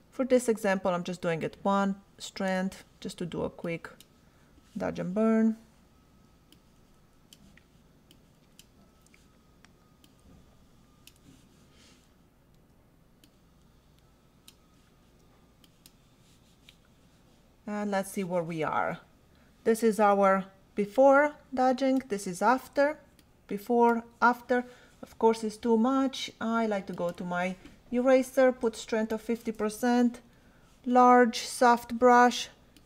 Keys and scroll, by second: 0.2 [, 0.9 ], 6.1 ], 9.6 [, 12.5 [, 15.0 ], 30.6 ].